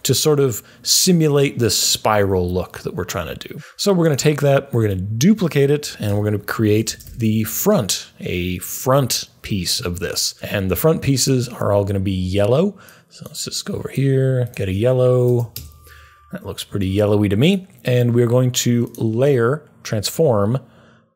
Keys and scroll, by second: 4.7 super+d, 6.5-7.5 typing, 14.9-15.8 typing.